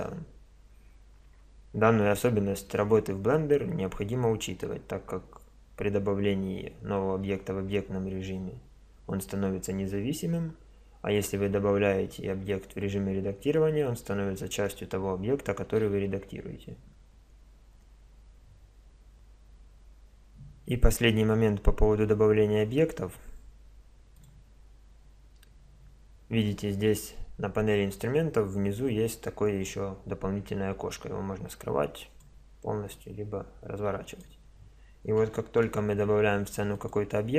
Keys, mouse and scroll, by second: 5.0 Tab, 24.2-27.4 drag, 27.4-29.6 middle drag, 29.6-31.4 drag, 33.0-34.8 drag, 35.4 shift+a.